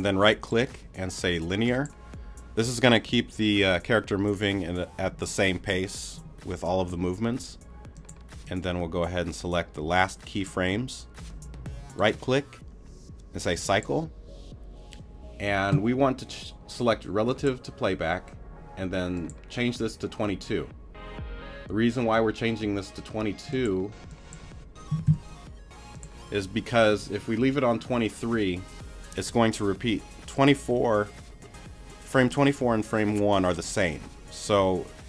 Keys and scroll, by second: 24.9 2.